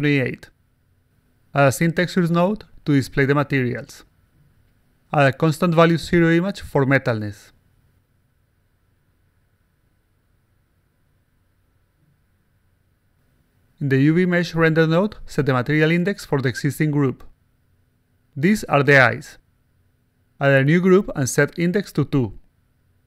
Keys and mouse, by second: 1.2 click, 2.2-3.5 drag, 5.2 click, 6.1-7.1 drag, 8.2 click, 8.7 click, 9.2 click, 9.7 0, 11.0-12.2 drag, 14.1 click, 14.2 click, 15.6 click, 16.7 click, 18.0 click, 18.4-19.6 typing, 20.4 click, 21.1 click, 21.5 click, 22.5 click.